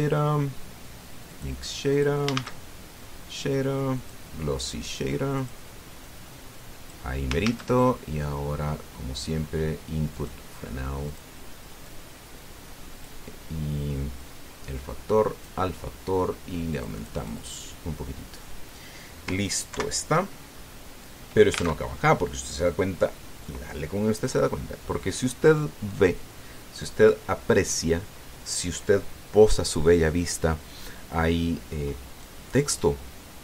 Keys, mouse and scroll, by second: 2.1 click, 2.7 click, 3.1 shift+a, 4.8 click, 6.2 click, 6.8-7.9 drag, 8.2 shift+a, 10.9 click, 11.8 click, 12.6-14.0 drag, 14.9-16.4 drag, 17.5 click, 20.5 ctrl+Right, 22.5 alt+Tab, 32.6-32.9 scroll up 2, 33.0 click.